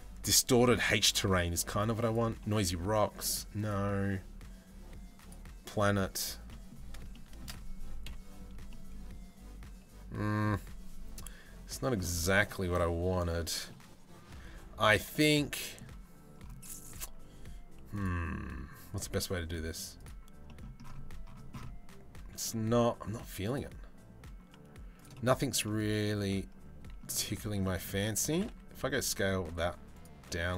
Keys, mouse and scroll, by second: 3.2-5.1 middle drag, 6.1 middle click, 6.7 shift+middle drag, 7.7 KP_Decimal, 8.3-10.0 middle drag, 12.7-13.3 middle drag, 15.0-15.4 middle drag, 17.7-19.8 drag, 20.1 middle click, 23.1-24.8 drag, 25.3-26.6 middle drag, 27.2 middle drag, 27.6 Tab, 27.9 a, 28.1 s, 29.8 z.